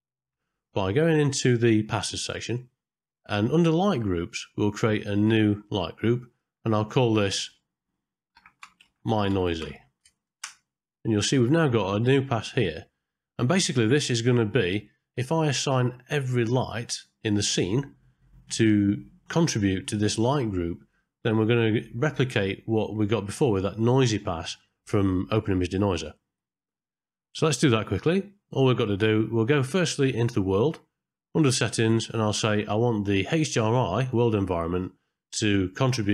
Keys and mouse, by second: 0.6 click, 2.0 middle click, 5.2 click, 6.1 click, 6.3-10.4 drag, 27.2 middle click, 31.6 drag, 32.1 middle click, 34.8 middle click, 35.9-36.1 drag.